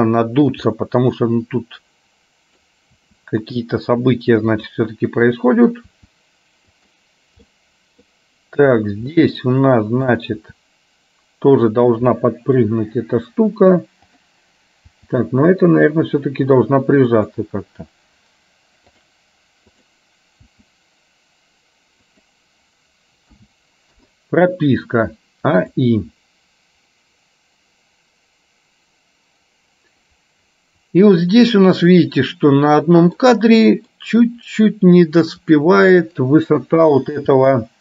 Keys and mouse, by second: 0.8-2.7 middle drag, 3.2 r, 5.3 click, 6.1 r, 7.5 middle click, 8.7 click, 9.2-10.2 middle drag, 10.5 r, 12.2 middle click, 14.2 click, 15.1 r, 19.1 click, 19.7 click, 20.7 r, 23.5 a, 24.1 i, 26.1-31.7 drag, 32.1-33.2 middle drag, 33.7 middle click, 37.3 g.